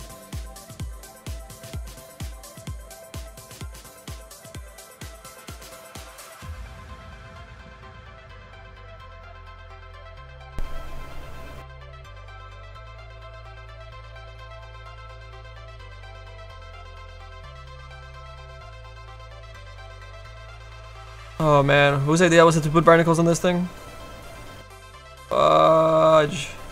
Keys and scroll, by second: 21.2 s, 22.4 s.